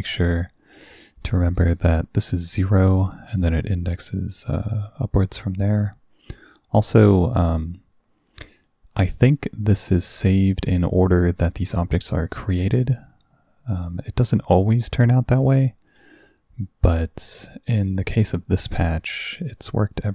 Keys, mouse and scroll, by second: 3.2 click, 7.3-8.7 drag, 15.9 click, 16.7-17.5 drag, 19.7-20.1 drag.